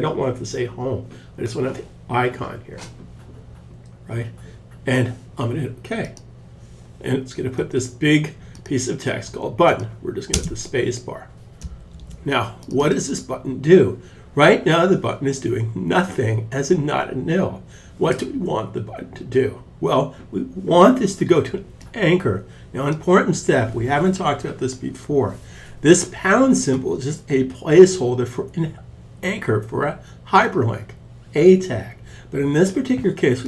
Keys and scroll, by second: 9.7 space, 11.3 super+s.